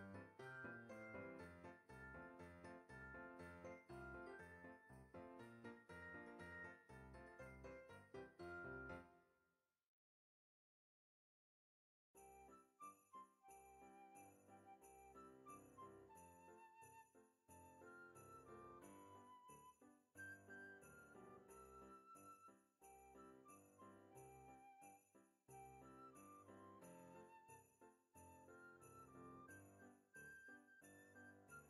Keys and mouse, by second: 0.8 click, 2.5 KP_3, 3.4 Tab, 4.0 middle click, 4.7 click, 5.1 shift+click, 5.7 middle click, 6.5 g, 7.8 click, 9.1 middle click, 9.6 g, 10.5 click, 11.3 g, 12.1 click, 13.4 KP_7, 14.5 Tab, 15.4 shift+d, 16.5 click, 16.6 r, 17.4 click, 17.9 g, 18.8 click, 19.5 middle click, 19.8 z, 20.8 click, 21.7 g, 22.6 click, 23.4 g, 24.5 click, 25.3 KP_1, 26.7 Tab, 27.2 middle click, 28.2 click, 28.7 alt+z, 29.0 shift+click, 29.4 alt+z, 30.5 g.